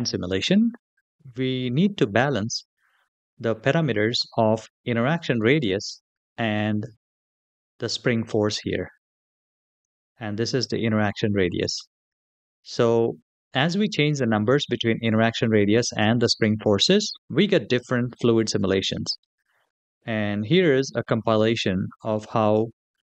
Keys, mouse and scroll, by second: 4.8-7.6 scroll down 3, 7.6 click, 9.6 click, 10.1-12.7 scroll down 2, 16.0 click.